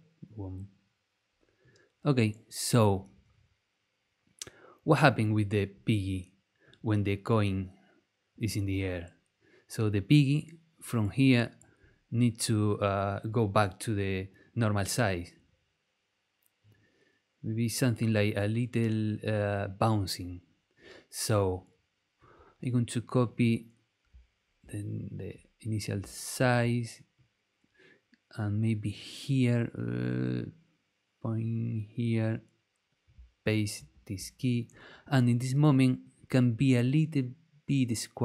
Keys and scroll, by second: 26.3 super+c, 33.7 super+v.